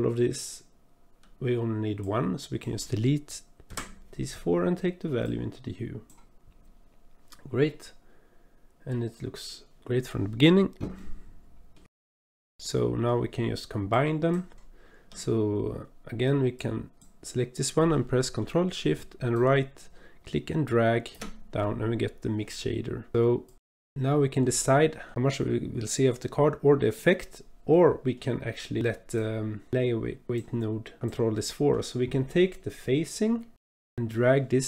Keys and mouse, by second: 2.0-2.6 drag, 3.7 Delete, 5.2-6.2 drag, 7.8-8.9 drag, 12.6 click, 13.9 click, 16.6 click, 19.3-21.2 ctrl+shift+drag, 23.4 click, 23.5 click, 23.8 click, 24.1 click, 24.2-26.4 drag, 26.9 click, 28.1-28.6 drag, 29.2-30.3 drag, 30.7 click, 31.4 click, 34.1-34.6 drag.